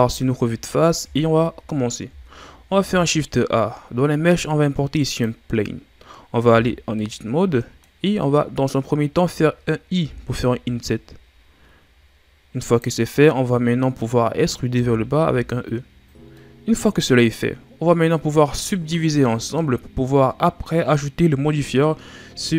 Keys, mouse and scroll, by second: 0.7-1.2 scroll down 4, 2.7 shift+a, 6.5 Tab, 6.9-8.1 middle drag, 8.1-9.9 scroll up 3, 9.9 i, 13.2-14.7 middle drag, 14.7 r, 16.0 e, 16.3-19.4 middle drag.